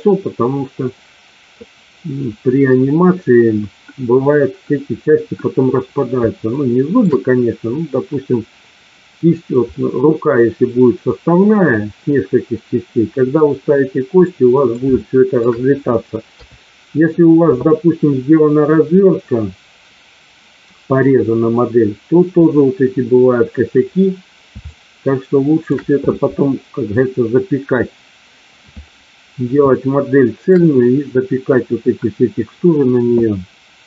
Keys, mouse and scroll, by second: 6.5 shift+middle click, 9.7-10.3 middle drag, 14.2-14.8 middle drag, 14.9-15.3 shift+middle drag, 16.3 KP_3, 24.7-25.7 shift+middle drag, 29.7-30.5 shift+middle drag.